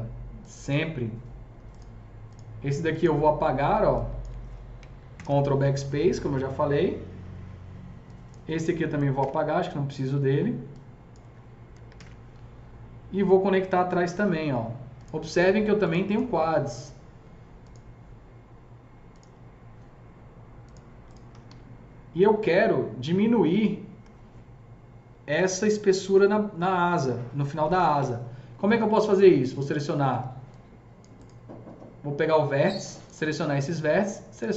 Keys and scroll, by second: 5.1 ctrl+BackSpace, 9.2 ctrl+BackSpace, 11.9 ctrl+BackSpace, 14.1 alt+c, 21.1-23.6 typing, 30.1 F3.